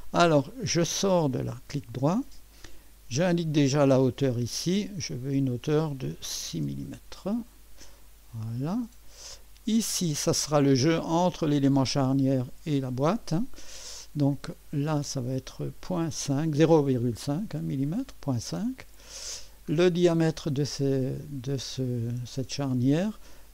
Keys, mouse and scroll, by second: 1.0 right click, 3.7 click, 5.1 click, 6.5 6, 7.4 Return, 8.6-9.3 drag, 15.0 click, 16.1 ., 16.9 5, 17.5 Return, 21.2 click.